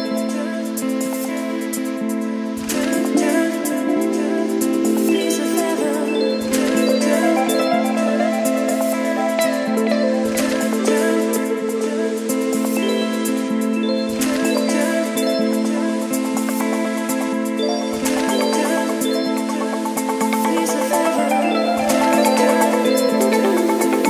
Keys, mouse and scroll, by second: 0.6 Return, 1.1 shift+~, 2.4 shift+3, 2.7 ctrl+v, 4.0-10.3 drag, 10.5 ctrl+s, 11.7-22.3 drag, 23.6-24.0 drag.